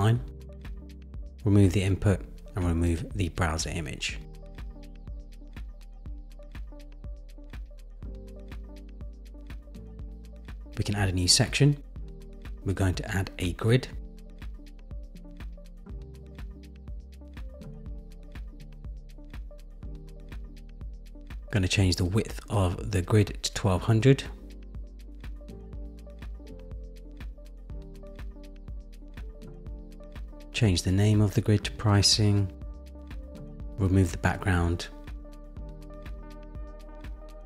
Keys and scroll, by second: 0.4 super+v, 29.3 super+=, 34.3 Return.